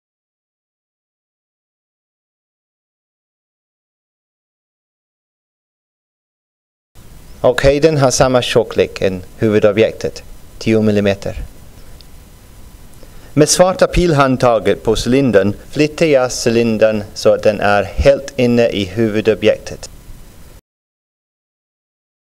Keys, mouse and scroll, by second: 1.1 click, 3.5-4.8 drag, 7.3 click, 10.7-14.0 drag.